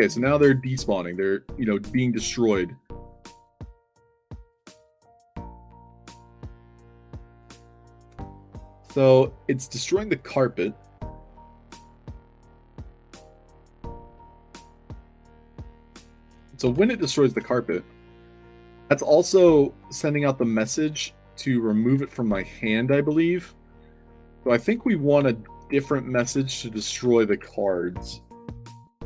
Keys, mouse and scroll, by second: 0.1-1.5 typing, 5.3 click, 16.4-17.1 typing, 19.0 a, 20.1 space, 20.7 space, 22.1-28.2 typing.